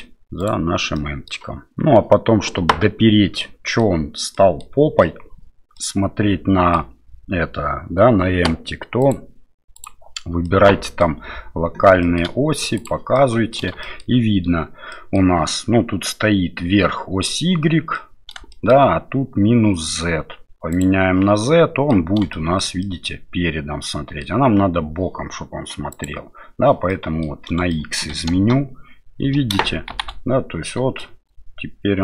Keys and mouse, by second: 0.9 middle click, 3.4 middle click, 4.3 middle click, 5.7-6.7 middle drag, 9.2 click, 10.4 middle click, 12.0 shift+middle click, 13.1 middle click, 13.8 shift+middle click, 14.9 middle click, 17.9 middle click, 18.5 shift+middle click, 20.7 click, 21.4 middle click, 22.3 shift+middle click, 22.8-24.2 middle drag, 25.9 click, 26.9 middle click, 27.7 shift+middle click, 28.3 space, 29.9 shift+Left, 30.6 middle click, 31.1 space.